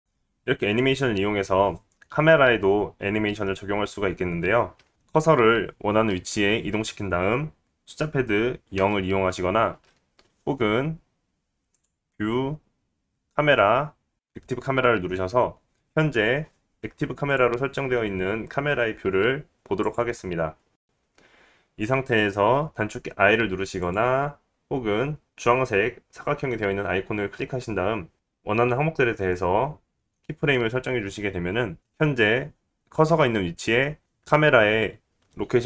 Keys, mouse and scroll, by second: 0.8 click, 9.9 KP_0, 10.9 KP_0, 12.9 click, 18.7-21.1 drag, 21.2-25.0 drag, 25.1-28.1 drag, 30.5-31.8 drag.